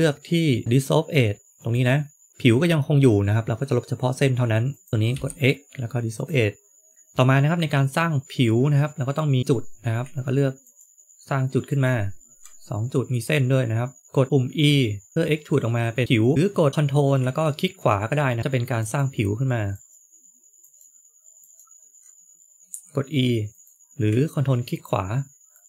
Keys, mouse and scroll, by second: 0.6 x, 2.3 middle click, 2.7 middle click, 4.6 click, 5.0 x, 6.8 click, 6.9 click, 10.6 ctrl+right click, 11.6 ctrl+right click, 15.1 e, 18.4 ctrl+right click, 18.7 ctrl+right click, 22.6 e, 24.6 ctrl+right click, 25.5 ctrl+right click.